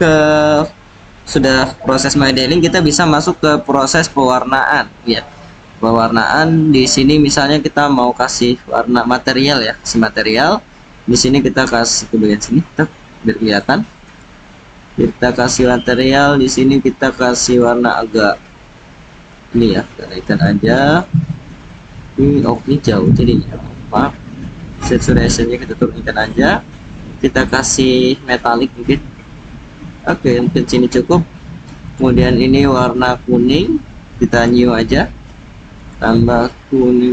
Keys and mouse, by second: 1.0-1.6 drag, 6.2-9.5 drag, 10.0 click, 13.6 click, 16.4 click, 17.5 click, 22.4 click, 28.7-30.4 drag, 31.9 click, 33.5 click, 35.8 click.